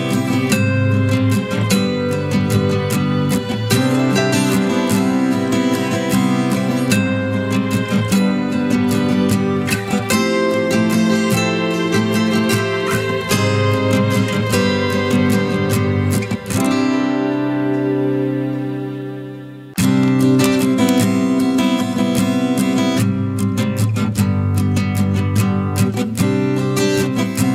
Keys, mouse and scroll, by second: 5.4 ctrl+t, 6.7 alt+shift+click, 13.6 Return, 18.1 ctrl+t, 19.0 ctrl+-.